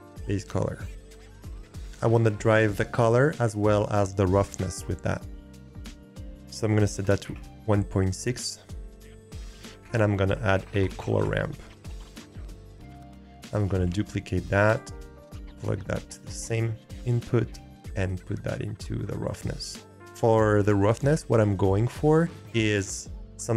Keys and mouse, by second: 6.0-7.3 drag, 9.5 shift+a, 13.9 shift+d, 15.3-16.1 drag, 18.0 click, 18.3-19.2 drag.